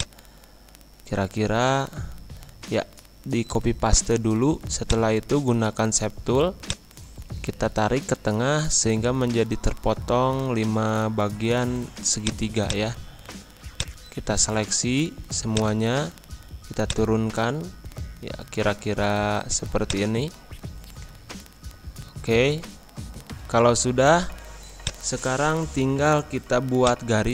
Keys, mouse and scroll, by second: 1.2 ctrl+c, 1.8 ctrl+v, 4.8-10.3 drag, 10.3 Pause, 12.1 click, 13.0-13.7 scroll down 1, 13.7-18.1 drag, 18.1 Pause, 19.8-23.8 drag, 23.8 scroll up 1, 24.2-24.7 scroll down 1, 24.8-27.3 drag.